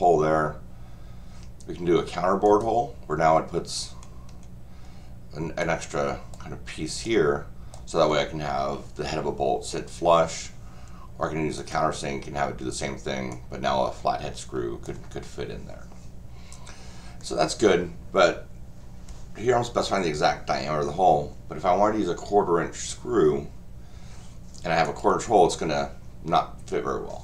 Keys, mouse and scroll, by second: 2.4 click, 4.0-4.4 scroll down 4, 5.6 click, 7.0 click, 11.6 click, 13.3-14.8 drag, 24.8 click.